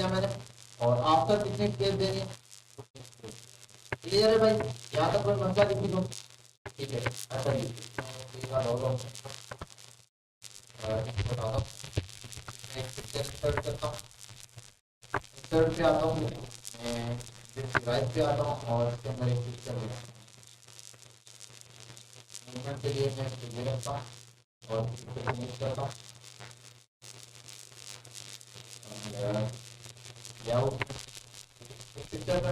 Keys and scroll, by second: 11.4 ctrl+a.